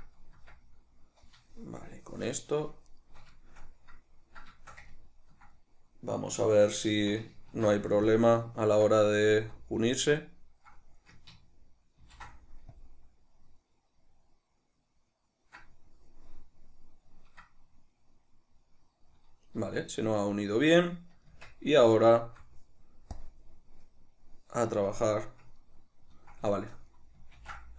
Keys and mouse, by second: 0.5 Tab, 2.5 right click, 3.0 shift+right click, 3.5-9.5 shift+middle drag, 7.6 ctrl+s, 9.5 z, 12.2 ctrl+shift+b, 16.4 middle click, 19.7 z, 20.2-23.3 middle drag, 21.4 Tab, 23.3 click, 25.7-27.7 ctrl+middle drag.